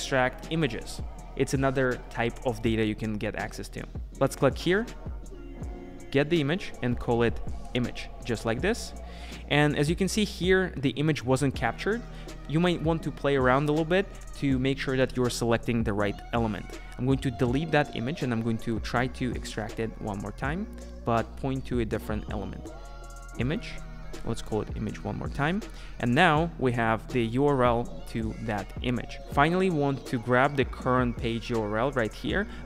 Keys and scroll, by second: 8.4 Return, 25.3 Return.